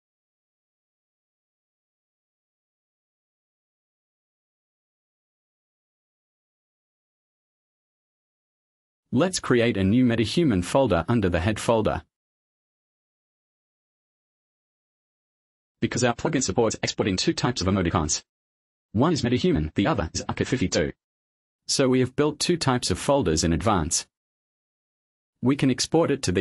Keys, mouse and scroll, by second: 0.0-0.1 typing, 2.2 click, 3.2 right click, 5.1 click, 6.0-7.3 typing, 8.5 click, 8.8 click, 11.9 click, 13.1-15.3 typing, 15.9 click, 18.6 click, 19.3-21.0 typing, 22.2 5, 22.6 Return.